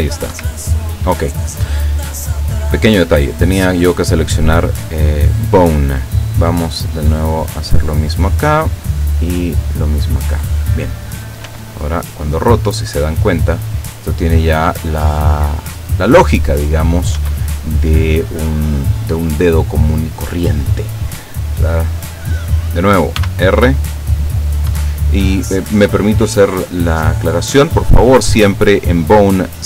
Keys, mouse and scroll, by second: 0.4 Escape, 2.6 right click, 5.8 right click, 7.0 click, 7.5 click, 7.8 middle click, 8.3 right click, 8.6 middle click, 9.1 click, 9.4 middle click, 9.6 click, 9.9 middle click, 10.5 right click, 11.5 r, 17.2 Escape, 23.3 r, 24.7 Escape, 26.4 right click.